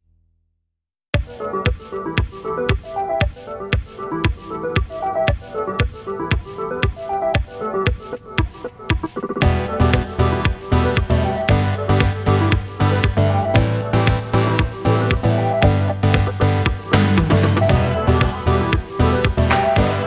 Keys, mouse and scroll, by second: 0.6 click, 1.5 click, 2.5 i, 3.7 click, 4.4 click, 8.3 click, 9.3 click, 11.4 click, 11.9 click, 13.5 click, 13.8 space, 15.3-15.6 scroll up 4, 15.5 right click, 18.4 space, 18.8 right click, 19.6 shift+a.